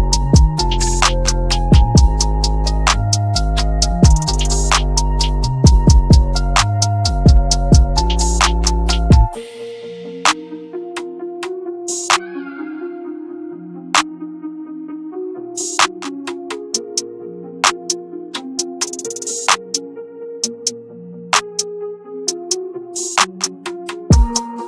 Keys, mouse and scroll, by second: 0.2-1.7 scroll down 1, 2.3-3.0 scroll up 1, 3.0 click, 3.3-4.2 scroll up 1, 4.2 click, 4.7-5.1 scroll down 1, 5.1-5.7 scroll up 1, 5.7 click, 6.1 scroll down 1, 6.4 click, 9.1-10.3 scroll down 1, 10.8 click, 13.7-14.1 scroll down 1, 14.1 scroll up 1, 14.7 click, 15.8-16.3 scroll down 1, 16.3 click, 18.5 scroll, 18.5-18.9 scroll up 1, 18.9 click, 21.7-22.3 scroll down 1, 22.3-23.0 scroll up 1, 23.0 click.